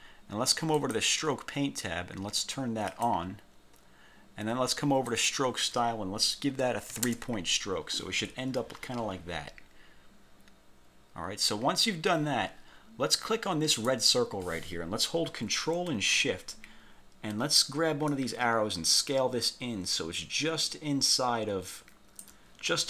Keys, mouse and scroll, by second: 0.9 click, 3.0 click, 5.2 click, 7.0 3, 7.1 Return, 13.9 click, 18.2 ctrl+shift+click.